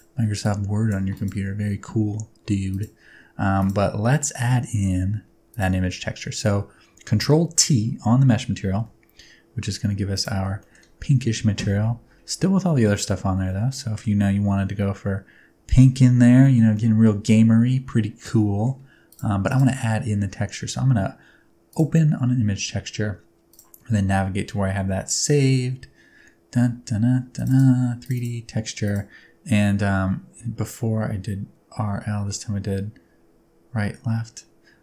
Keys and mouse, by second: 0.4 click, 3.6 click, 7.5 ctrl+t, 8.7 g, 13.8 middle click, 16.6 shift+middle click, 16.8 middle click, 18.4 middle click, 19.5 click.